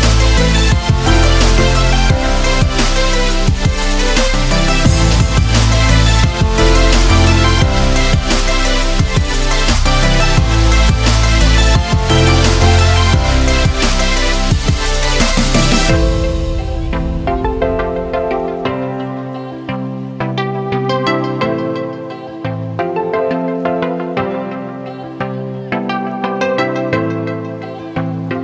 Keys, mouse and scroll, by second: 4.7 ctrl+z, 5.7-7.2 drag, 7.2-11.5 shift+drag, 12.7 click, 14.0 ctrl+space, 14.1 ctrl+click, 14.5 ctrl+space, 18.7 ctrl+shift+s, 19.8 click, 23.9 click.